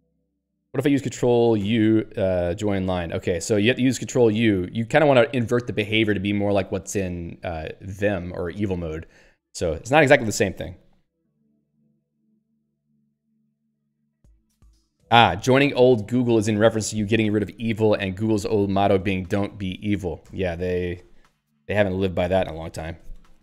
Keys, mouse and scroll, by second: 1.6 ctrl+u, 1.9 alt+x, 2.6 Return, 3.5 Return, 4.2 Up, 4.7 Right.